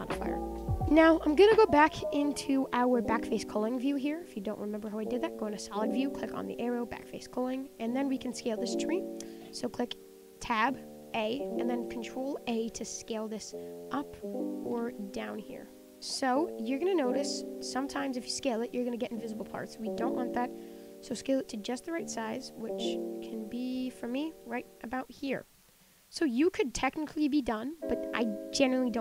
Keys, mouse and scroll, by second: 0.1 scroll down 1, 0.3 scroll up 7, 0.4-1.6 shift+middle drag, 1.6 click, 3.7 click, 4.0 middle click, 4.5-7.2 scroll up 3, 7.2-7.9 scroll down 3, 7.9 click, 8.2-8.9 middle drag, 8.9-9.7 scroll up 4, 9.7-10.5 middle drag, 10.5 Tab, 11.2 a, 11.6-16.0 shift+middle drag, 17.4 middle click, 17.7-18.0 scroll up 6, 18.0 shift+middle click, 18.4 scroll up 4, 18.6 shift+middle click, 19.5-20.3 scroll down 11, 20.3 middle click, 21.0 ctrl+a, 24.0 Tab, 24.1 middle click, 24.4 click, 24.5 scroll down 1, 24.7-25.5 middle drag, 25.5-25.9 scroll up 3, 25.9-26.7 middle drag, 26.7 scroll down 4, 26.9-29.0 middle drag.